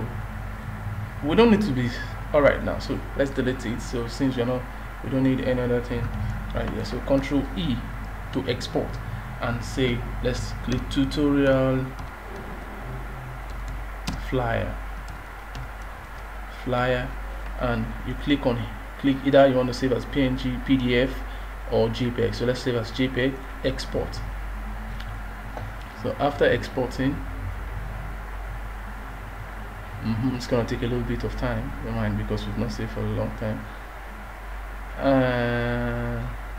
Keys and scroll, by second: 7.2 ctrl+e.